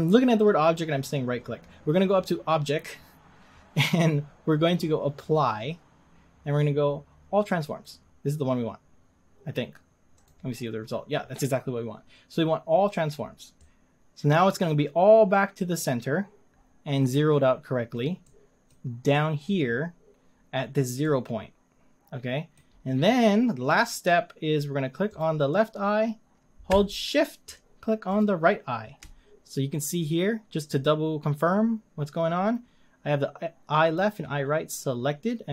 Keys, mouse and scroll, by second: 10.3 click, 13.6-16.9 middle drag, 18.2-19.9 middle drag, 19.9-20.4 scroll down 2, 21.0-22.7 middle drag, 22.7-23.1 scroll up 3, 25.2 click.